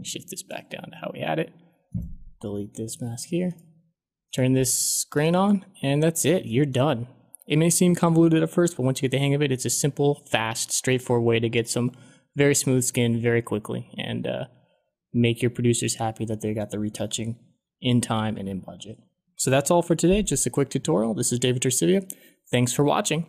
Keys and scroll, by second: 2.8 Delete.